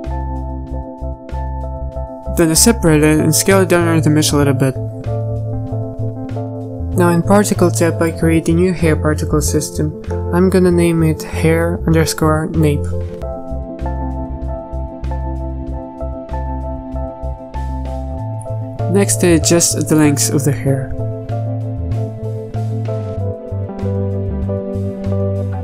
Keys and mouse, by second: 1.5-3.6 typing, 3.0 Tab, 3.8 alt+s, 5.5 Tab, 5.7 z, 11.1 click, 15.5-21.2 drag, 22.6-25.6 drag.